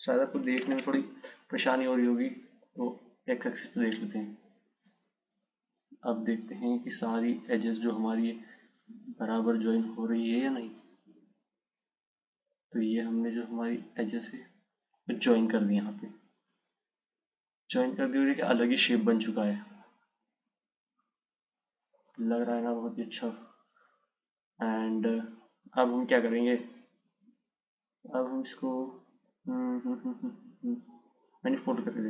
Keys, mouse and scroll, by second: 0.9 ctrl+z, 2.7 click, 5.1 click, 16.8 click, 26.9-30.1 drag.